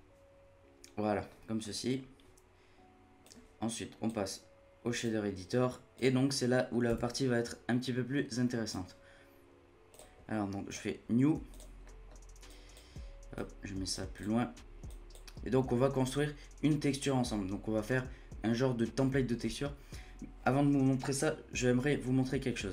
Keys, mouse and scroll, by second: 3.0 scroll up 1, 3.2-6.6 drag, 6.6 scroll down 1, 6.9 n, 8.6 click, 9.1-9.9 scroll up 1, 9.9-11.2 drag, 11.2 scroll down 1, 11.5 click, 11.8 middle click, 12.1 scroll up 1, 12.5-14.2 drag, 14.9-17.9 drag.